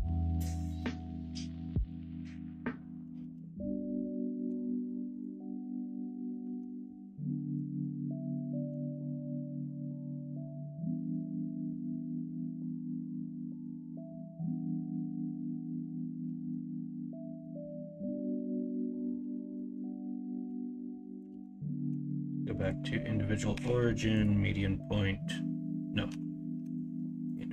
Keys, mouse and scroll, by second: 2.8 middle click, 3.1 ctrl+z, 6.1 middle click, 6.4 alt+z, 6.7 middle click, 8.7 middle click, 16.0 middle click, 18.4 middle click, 19.1 alt+z, 19.5 middle click, 20.4 s, 21.3 ctrl+z, 21.8 ., 24.2 ., 26.0 ., 26.6 ..